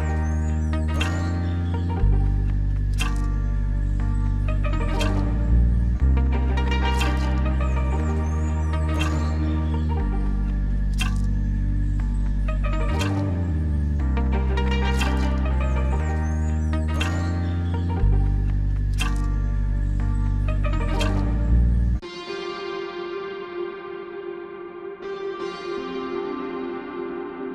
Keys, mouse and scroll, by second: 0.1 click, 0.6 click, 2.1 click, 2.3 click, 2.7 click, 3.1 click, 3.2 click, 3.3 click, 5.9 click, 6.1 click, 6.1 click, 7.1 click, 9.8 scroll down 2, 10.2 a, 11.0 g, 11.8 click, 12.2-13.0 scroll up 4, 13.0 click, 17.8 click, 20.3-20.9 scroll down 3, 22.3 click, 23.4 click, 24.6 ctrl+shift+click.